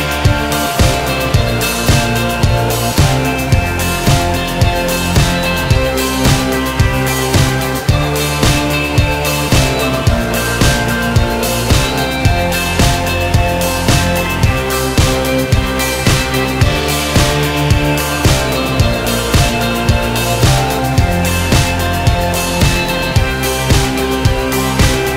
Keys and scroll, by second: 21.2 ctrl+r, 23.3 ctrl+a.